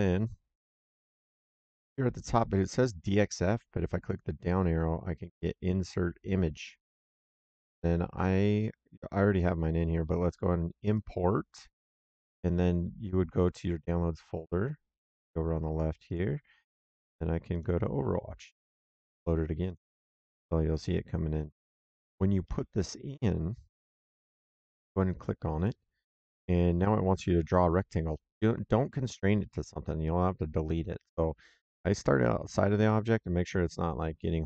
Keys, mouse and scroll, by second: 0.9 middle click, 3.9 click, 6.1 click, 10.8 click, 16.0 click, 17.4 click, 19.6 click, 22.3 middle click, 25.1 click.